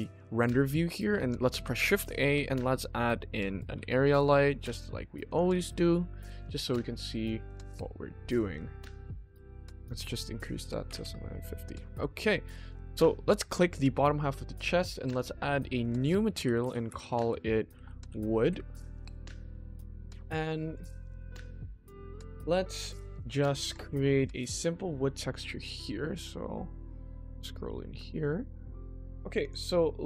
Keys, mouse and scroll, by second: 0.7 middle drag, 1.4 shift+a, 3.7 g, 6.1 click, 6.5-7.0 middle drag, 8.5 click, 9.6 click, 10.1 click, 11.7 click, 12.0-12.3 middle drag, 12.8 click, 13.5 middle click, 15.0 click, 15.5-18.5 drag, 17.9 o, 19.3 middle click, 19.8-21.4 ctrl+middle drag, 21.5 shift+middle click, 22.0 click, 23.2-25.3 ctrl+middle drag, 25.7-26.3 middle drag, 26.3-26.9 scroll up 1, 26.9-27.8 scroll up 2, 27.3-27.8 shift+middle drag, 28.1 middle click, 29.3 click, 29.8 middle click.